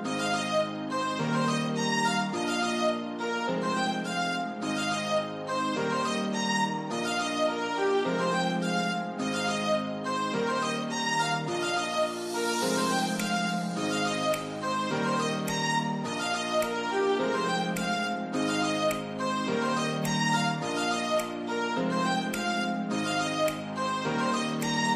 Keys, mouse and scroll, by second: 1.6-2.5 typing, 6.9 Return, 7.1 ctrl+z, 7.4 ctrl+z, 13.1 ctrl+z, 13.6 ctrl+d, 22.4 c, 22.4 Delete, 23.0 Delete.